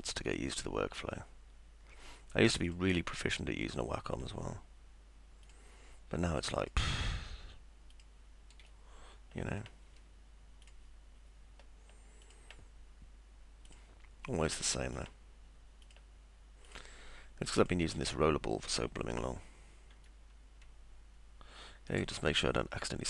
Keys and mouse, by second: 0.3 click, 2.7 click, 5.5 ctrl+click, 6.6 ctrl+click, 7.9 ctrl+click, 8.7 middle click, 10.7 ctrl+click, 12.2 ctrl+click, 13.7 ctrl+click, 15.0 ctrl+click, 15.9 ctrl+click, 16.7 ctrl+click, 17.6 ctrl+click, 20.2-22.1 alt+middle drag.